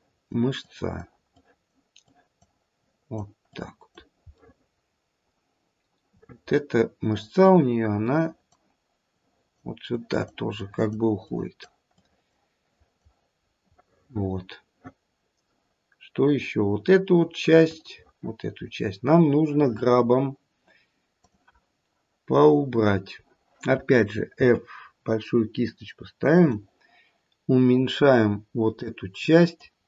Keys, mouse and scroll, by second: 0.6 click, 1.3 click, 2.1 click, 2.8 click, 3.5 click, 4.3 middle click, 4.6 middle click, 6.2 middle click, 7.9 click, 9.1 click, 9.9 click, 10.5 click, 11.3 click, 11.9 click, 12.6 click, 13.3-14.8 scroll down 3, 13.7 middle click, 17.5 middle click, 21.3 click, 24.3 f, 28.8 click.